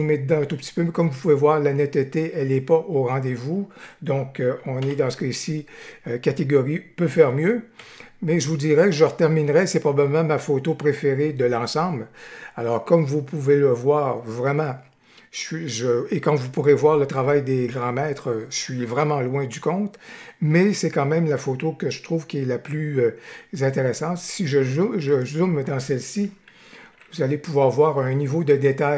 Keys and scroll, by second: 4.7 ctrl+-, 7.7 Right, 26.8 ctrl+=.